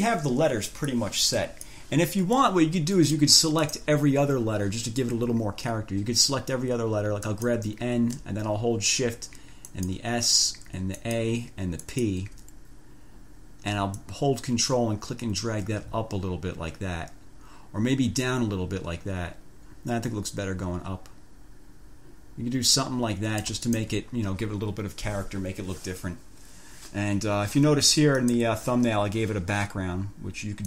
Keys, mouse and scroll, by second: 1.1-2.1 drag, 2.6-3.6 drag, 3.8 click, 7.5 click, 9.8 shift+click, 11.2 shift+click, 12.0 shift+click, 14.2-23.8 ctrl+drag, 24.4 ctrl+scroll down 2, 28.4 click.